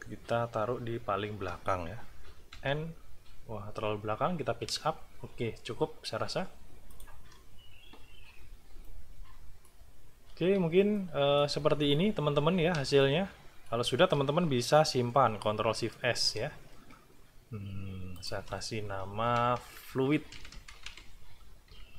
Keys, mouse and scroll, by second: 2.5 End, 4.6 Page_Up, 6.9 click, 8.8-9.8 middle drag, 10.1 ctrl+scroll down 2, 10.9 ctrl+click, 11.7-12.4 ctrl+scroll up 2, 13.0 ctrl+click, 15.4 ctrl+shift+s, 18.1 click, 19.2 Left, 21.2-21.9 typing.